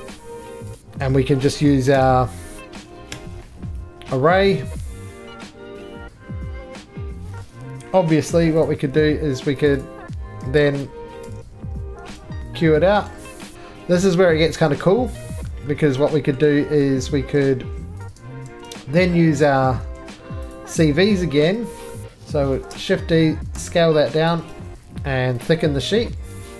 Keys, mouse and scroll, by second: 0.6 click, 0.8 right click, 0.9 middle click, 1.1 middle click, 1.9 1, 2.8 click, 2.8 z, 3.1 y, 4.5 click, 4.7 shift+click, 4.8 shift+scroll, 5.0-5.4 shift+scroll down 3, 5.5-6.6 shift+scroll, 6.6-7.2 shift+scroll, 7.2 alt+x, 7.2 click, 7.2 right click, 7.2 middle click, 7.4 middle click, 8.3 4, 8.7 click, 9.7 shift+click, 9.8 shift+click, 11.3 click, 11.4 q, 12.2 right click, 12.6 middle click, 13.1 right click, 13.5 middle click, 13.5 shift+click, 13.5 shift+middle click, 13.5 3, 14.6 click, 14.6-15.5 shift+scroll down 2, 15.5 middle click, 15.5-16.1 scroll down 9, 15.8 middle click, 16.4 shift+middle click, 16.8 middle click, 17.0-17.6 scroll down 3, 17.6 scroll up 9, 17.6 2, 18.1 click, 18.1 scroll, 18.5 x, 18.9-19.5 scroll, 19.5 click, 19.5-19.9 scroll, 20.0 3, 20.1 middle click, 20.6 click, 20.8-21.4 scroll, 21.4 shift+middle click, 21.8 scroll, 21.9 middle click, 22.5-24.4 typing, 23.9 scroll, 24.3 click, 24.5 right click, 25.5 click, 25.5 d.